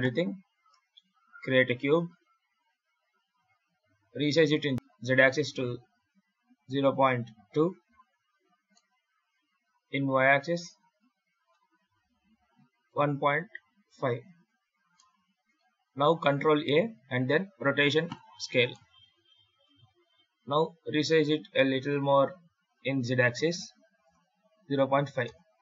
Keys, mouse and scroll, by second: 0.7 shift+a, 2.0 scroll up 6, 4.4 s, 8.6 middle click, 10.1 s, 14.8 middle click, 16.4 ctrl+a, 18.6 middle click, 20.1 s.